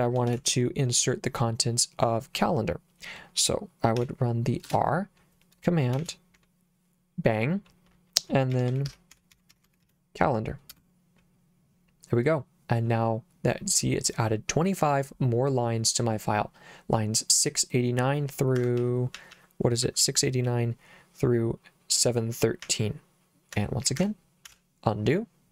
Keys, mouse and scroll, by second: 0.3 shift+;, 4.0 r, 4.7 space, 6.0 shift+1, 8.3-10.3 typing, 10.7 Return, 18.6 Escape, 18.8 j, 19.2 j, 19.4 j, 19.9 j, 22.7 k, 24.0 Escape, 24.5 u.